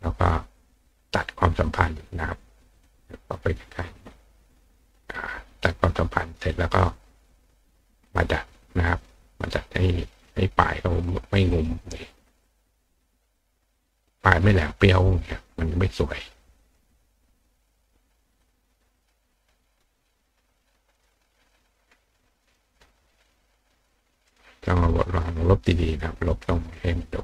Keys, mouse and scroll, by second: 1.1 click, 1.6 click, 2.7 click, 3.3 click, 4.7 click, 8.0 click, 9.6-11.1 drag, 11.5 click, 12.4 click, 13.7 click, 14.9 click, 16.4 click, 16.6 click, 17.5 click, 17.8 click, 18.4 click, 20.9 click, 21.5 click, 22.4 click, 22.7 click, 24.2 click, 24.7 click, 25.7 click, 25.9 click, 26.3 click, 26.7 click.